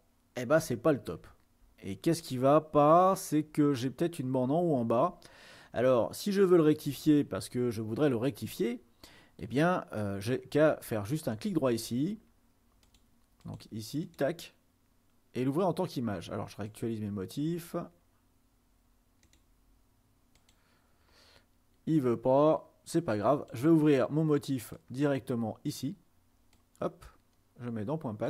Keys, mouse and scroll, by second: 0.2-0.6 ctrl+scroll up 2, 1.5 ctrl+scroll up 2, 4.1 scroll up 2, 5.2-7.4 ctrl+scroll down 1, 12.9-13.9 drag, 16.7-17.9 drag, 19.4 click, 20.5 click, 23.1 click, 25.0 click, 26.6-28.2 drag.